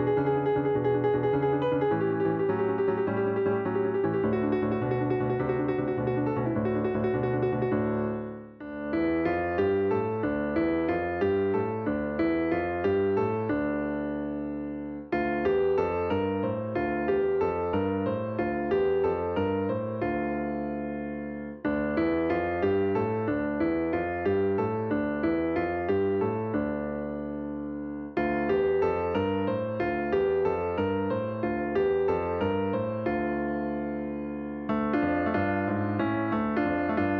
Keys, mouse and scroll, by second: 2.3-3.8 drag, 3.9-8.1 drag, 10.4-12.7 drag, 14.5 l, 14.8 l, 15.9 drag, 17.0 click, 19.3-21.0 drag, 24.4 click, 24.7-29.1 drag, 30.2-32.3 shift+middle drag, 32.3 l, 33.5 click, 34.6-37.1 drag.